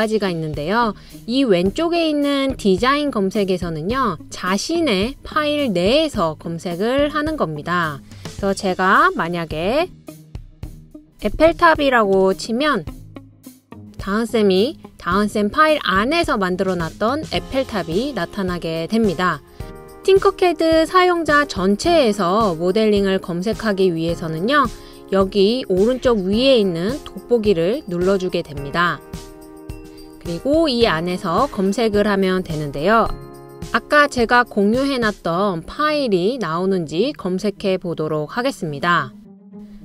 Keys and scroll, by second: 10.0-13.3 typing, 26.8 typing, 33.5-38.4 typing.